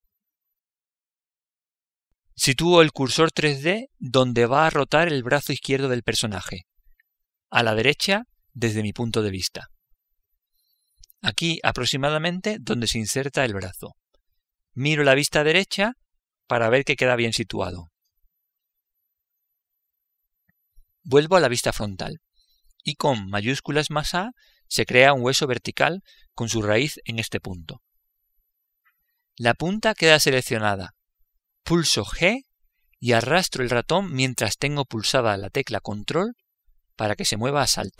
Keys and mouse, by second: 7.5 click, 16.0 KP_3, 21.9 KP_1, 24.4 shift+a, 32.6 g.